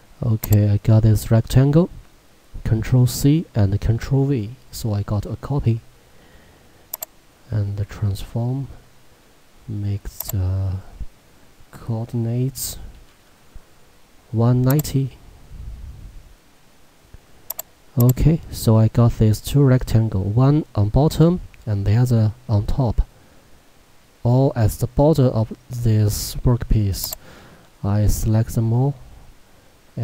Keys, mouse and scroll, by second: 3.1 ctrl+c, 7.0 click, 10.3 click, 14.8 click, 17.5 click, 27.1 click.